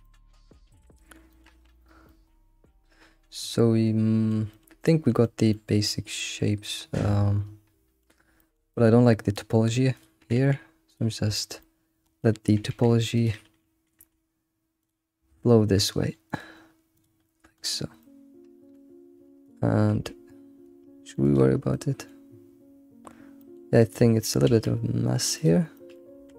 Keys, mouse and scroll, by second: 0.0 middle click, 0.6 alt+shift+z, 0.8 middle click, 1.6 scroll, 1.7-2.1 scroll up 5, 2.1-4.6 middle drag, 4.8-8.0 middle drag, 8.0 scroll up 1, 8.2 scroll down 1, 8.4-9.9 middle drag, 9.9 click, 10.2 g, 10.2 g, 11.3-12.5 shift+middle drag, 12.5 g, 14.0 k, 18.0-19.4 middle drag, 19.4 click, 19.9 Tab, 20.0 Tab, 21.3 click, 21.7-22.3 middle drag, 22.3 scroll up 2, 23.4-24.0 middle drag, 24.0 alt+shift+z, 24.5 alt+shift+z, 25.4 click, 25.8-26.2 middle drag, 26.2 Tab.